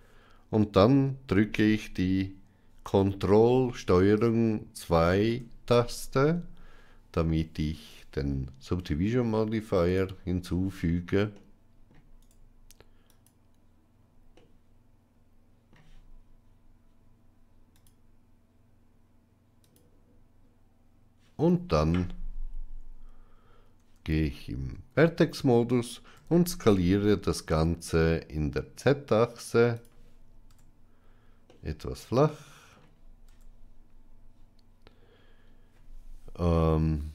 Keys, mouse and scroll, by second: 4.8 ctrl+2, 9.7 click, 11.3 middle click, 12.1-13.1 right drag, 14.2-15.6 middle drag, 17.6 click, 19.5 click, 23.7 Tab, 24.6 a, 26.0 s, 30.4 Tab, 31.4-32.6 middle drag, 33.1 Tab.